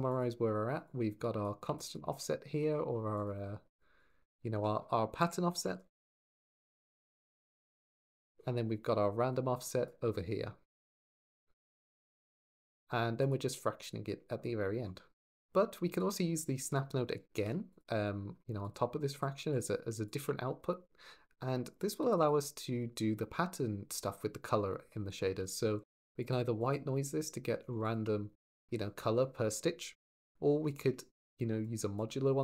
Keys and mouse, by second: 0.7 click, 1.6 shift+drag, 2.4 ctrl+j, 3.0 click, 3.1 g, 3.8 click, 5.0 F2, 6.1 t, 7.3 f, 9.1 drag, 10.5 ctrl+j, 11.8 drag, 12.1 click, 13.0 click, 13.2 g, 15.1 click, 15.8 click, 19.0 click, 19.9 ctrl+shift+click, 21.8 shift+a, 27.6 ctrl+shift+click, 30.4 click, 30.9 x.